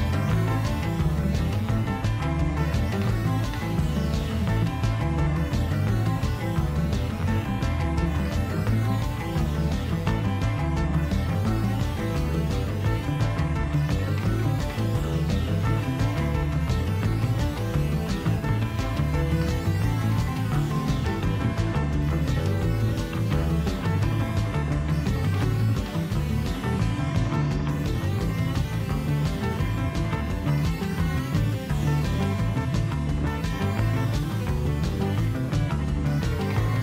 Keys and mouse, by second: 1.4 shift+a, 8.8-11.3 shift+middle drag, 11.3-13.7 drag, 16.3 drag, 19.9-24.5 drag, 27.1-32.9 drag.